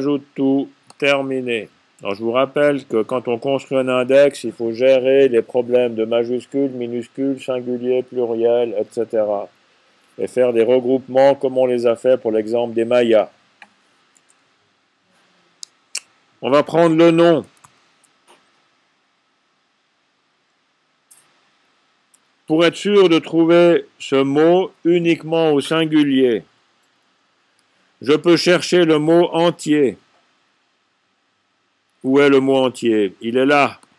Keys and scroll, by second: 17.3-18.7 typing.